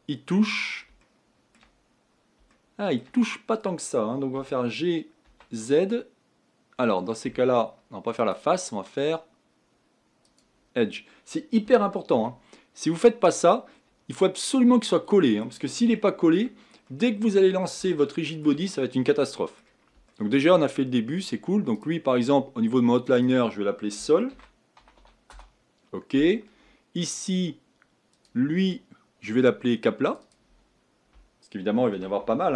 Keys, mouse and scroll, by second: 0.6-1.0 scroll up 4, 1.0 shift+middle click, 1.8-2.5 scroll up 4, 2.5-4.3 shift+middle drag, 4.3 g, 8.2-11.6 drag, 11.6 g, 13.7-14.5 scroll down 7, 14.5-17.5 middle drag, 17.5-17.9 scroll down 1, 17.9-20.7 shift+middle drag, 20.7-21.7 scroll down 3, 21.7-26.2 drag, 28.1-32.5 drag.